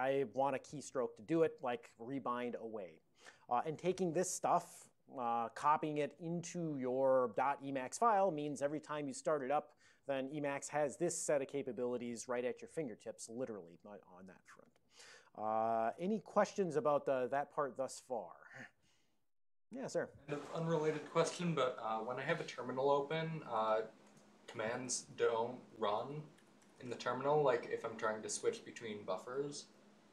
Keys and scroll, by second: 4.6 ctrl+a, 5.3 ctrl+p, 5.9 ctrl+n.